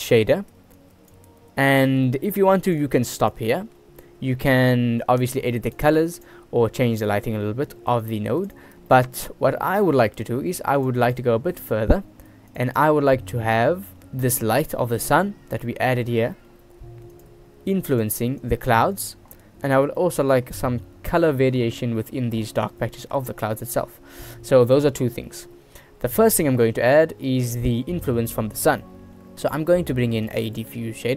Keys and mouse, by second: 0.0 middle click, 0.9 click, 2.3 g, 3.4 drag, 3.6 click, 5.9 click, 8.2 click, 9.0 click, 9.4-10.0 drag, 10.6 g, 11.2 click, 11.7-12.1 drag, 12.5 g, 12.9 click, 13.9 shift+click, 15.8 click, 16.5 shift+click, 17.3 click, 18.1 click, 18.5 click, 20.1 shift+drag, 23.0 shift+click, 23.7 shift+click, 26.4 click, 27.4 middle click, 29.0 middle click, 30.3 shift+a.